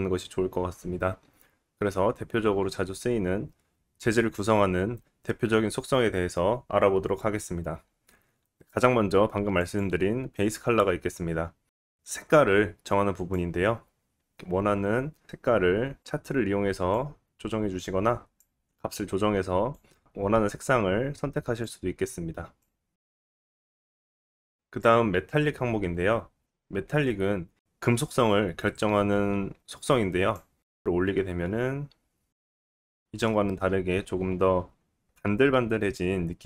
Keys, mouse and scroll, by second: 9.6 click, 9.7-11.7 middle drag, 11.7-14.3 drag, 14.3-16.0 middle drag, 22.8-30.6 middle drag, 30.6-36.4 drag.